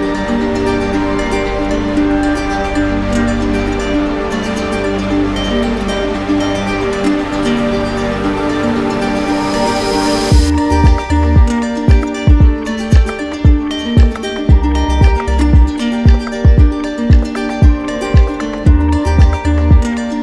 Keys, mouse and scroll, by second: 1.5 click, 4.8 click, 5.5 click, 7.6 click, 15.0 click, 16.0 click, 18.3 click.